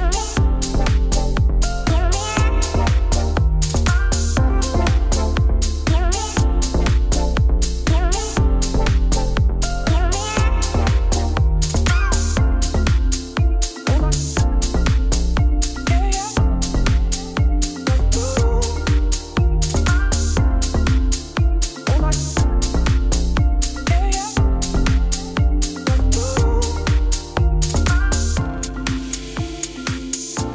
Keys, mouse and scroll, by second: 0.4 Tab, 0.9 scroll down 1, 1.1 middle click, 1.3 click, 1.4 Tab, 1.6 a, 2.6-3.9 middle drag, 3.9 KP_1, 4.2 g, 4.9 middle click, 5.1 scroll down 1, 5.2 Tab, 5.4 shift+a, 7.6 scroll up 1, 7.8 shift+middle click, 8.3 1, 11.8 e, 12.5 1, 12.6 click, 12.7 shift+click, 13.0 ctrl+b, 14.7 click, 15.2 m, 16.3 Tab, 16.7 q, 18.2 middle click, 18.6 click, 19.1-20.7 drag, 21.8 click, 22.6-23.4 scroll down 1, 23.4 r, 24.5-25.7 middle drag, 25.7 scroll down 1, 26.3 click, 26.6 Tab, 27.0 KP_1, 27.7 scroll up 1, 27.9 click, 28.1 g, 30.4 e.